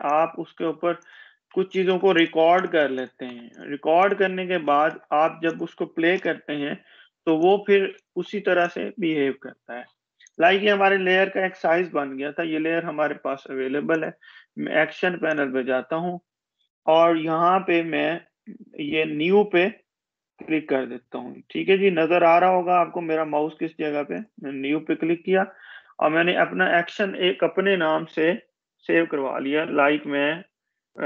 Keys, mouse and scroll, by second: 3.0 Delete, 4.6 click, 5.1 Delete, 5.9 click, 6.8 Delete, 8.9 click, 14.1 click, 18.4-19.6 scroll down 1, 24.1 click, 30.0-31.0 typing.